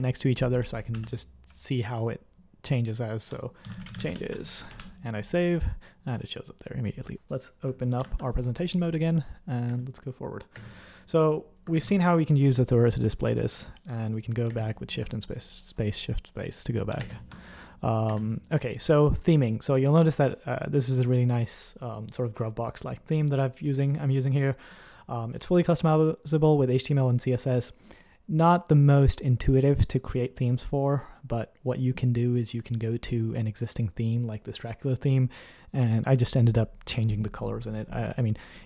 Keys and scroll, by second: 0.5-0.9 typing, 3.4-5.1 typing, 8.0 F5, 9.6 space, 10.5 space, 11.7 shift+space, 17.2 shift+space, 18.1 _.